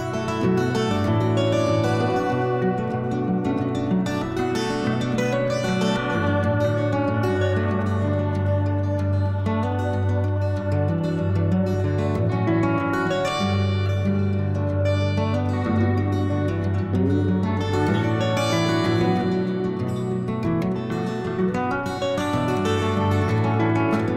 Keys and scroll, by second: 21.9 ctrl+z, 22.1 ctrl+z, 22.4 ctrl+z, 22.6 ctrl+z, 22.8 ctrl+z.